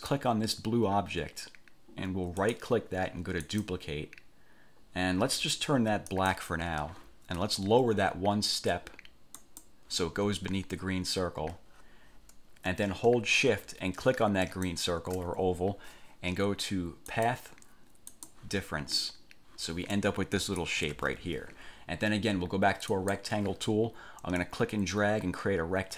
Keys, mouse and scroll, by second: 0.1 click, 2.6 click, 3.6 click, 6.3 click, 9.6 click, 14.6 shift+click, 17.3 click, 18.3 click, 20.1 click, 21.1 ctrl+z, 23.1 click, 24.6-25.9 drag.